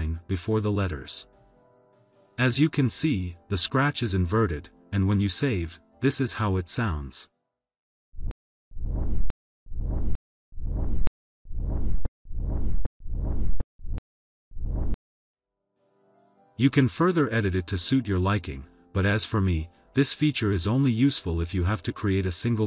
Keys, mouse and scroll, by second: 1.3-2.0 drag, 2.7 click, 5.4 click, 6.0 click, 8.1 click, 12.9 click, 13.7 click, 14.4 click, 16.0 click, 16.8-18.3 typing, 19.5 click, 19.8 click, 20.3 click, 20.6 click, 22.3 click.